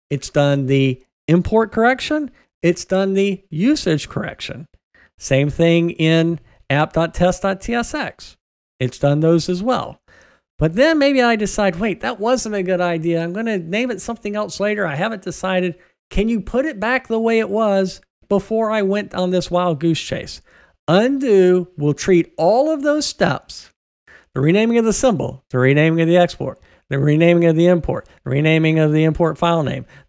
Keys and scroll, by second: 21.1 super+z.